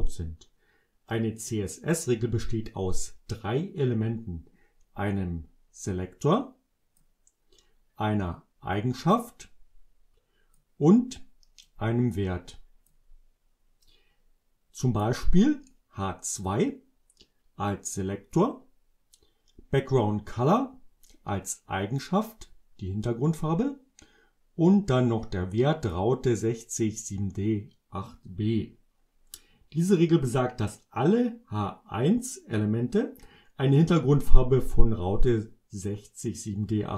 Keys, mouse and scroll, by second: 5.8-7.2 drag, 8.8-10.7 drag, 11.7-13.1 drag, 20.5-22.2 drag, 24.7-26.1 drag.